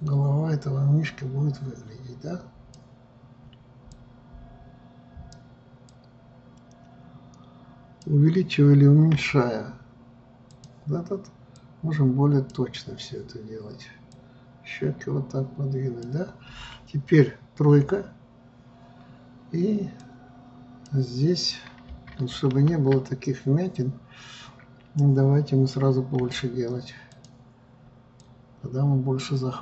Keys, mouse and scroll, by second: 0.1-3.2 drag, 4.0-9.1 drag, 11.7-17.4 drag, 18.0 KP_3, 20.2-22.7 drag, 22.7 ctrl+z, 28.3-29.6 drag.